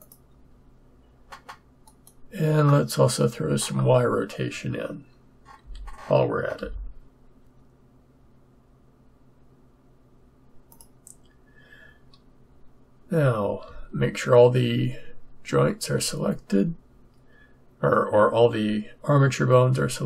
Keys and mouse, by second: 5.6 r, 13.6 a, 15.8 a.